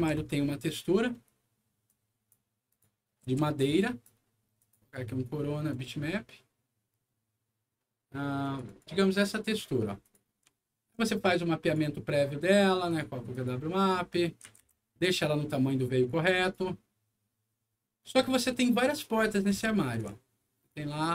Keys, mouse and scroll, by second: 1.8 click, 2.6 click, 3.2 a, 3.7 click, 4.5 click, 5.6 click, 8.3 click, 8.6 click, 9.9 click, 10.5 alt+middle click, 11.6 alt+click, 12.8 alt+click, 13.2 alt+click, 13.7 alt+click, 14.1 middle click, 14.2-15.1 typing, 15.1-16.1 drag, 16.3 right click, 18.8 click, 19.2 scroll down 1, 19.4 w, 20.6-21.1 shift+drag.